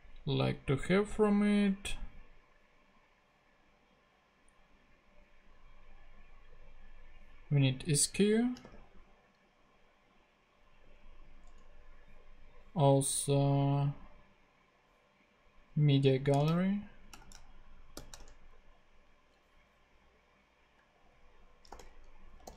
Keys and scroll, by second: 8.1-9.1 typing, 10.6 ⟲, 11.4 Return, 17.7-19.2 typing, 21.1-22.5 typing.